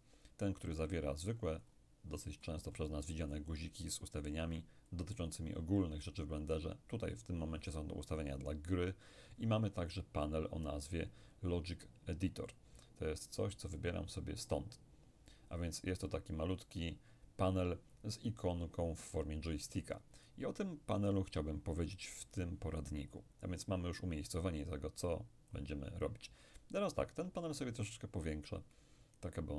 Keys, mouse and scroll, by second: 0.7-2.1 scroll down 1, 2.1-4.4 scroll up 1, 5.0-7.4 drag, 12.5 click, 20.3 click, 24.4-26.5 drag, 27.6-29.5 drag.